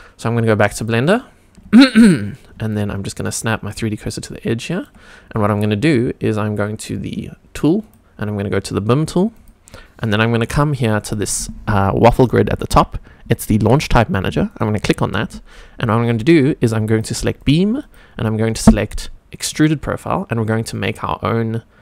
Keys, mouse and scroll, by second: 0.8 click, 1.2 scroll up 1, 1.8 shift+middle drag, 2.7 shift+right click, 5.2 scroll down 1, 5.5 shift+middle click, 6.0-7.8 scroll up 1, 7.8 click, 9.3 click, 14.5-21.8 drag.